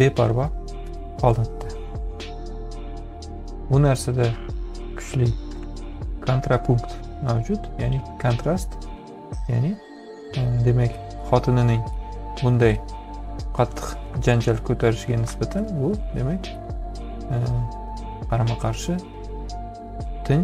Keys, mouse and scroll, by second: 4.1-6.2 drag, 11.3 ctrl+z, 12.0-14.1 drag.